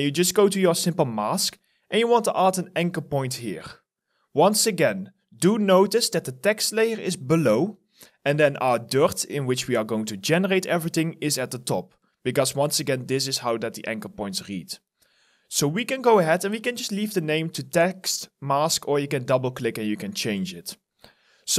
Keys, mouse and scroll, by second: 19.0 double click.